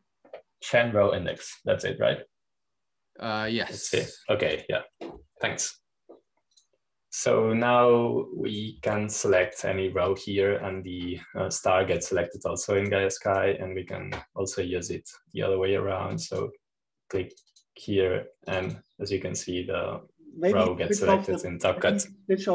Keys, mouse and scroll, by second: 0.0 click, 3.2 click, 5.8 click, 6.4 click, 7.1 click, 8.4 click, 9.5-12.7 drag, 13.1-13.6 scroll up 1, 13.6-14.2 scroll down 1, 14.2-17.3 drag, 18.1-20.2 drag, 20.4-21.5 drag.